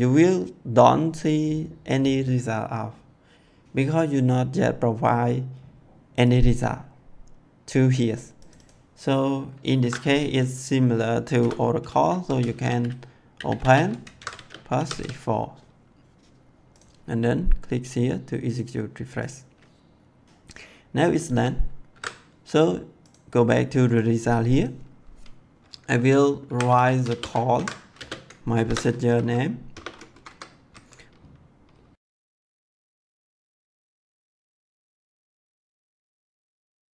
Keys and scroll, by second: 9.8 ctrl+c, 11.4 Return, 12.2-14.9 typing, 14.1 ctrl+v, 21.9 ctrl+c, 26.4-29.6 typing, 27.5 ctrl+v, 30.1 Left, 32.8 1, 33.0 ,, 34.8 Left, 36.1 Right.